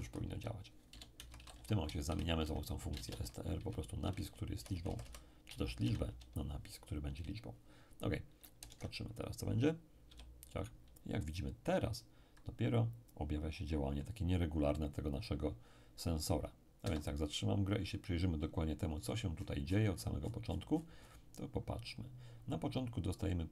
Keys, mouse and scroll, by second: 0.0 Left, 0.3-3.6 typing, 1.1 Left, 4.3 Right, 4.5 Right, 5.8 0, 8.6 alt+Tab, 10.0 p, 16.8 Escape, 18.9-22.0 scroll up 1.